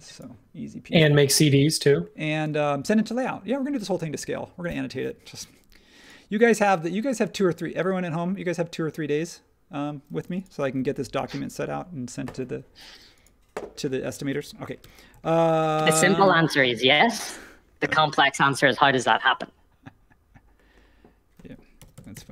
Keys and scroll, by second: 2.5 space, 10.2 space, 14.8 m, 21.5-22.3 typing.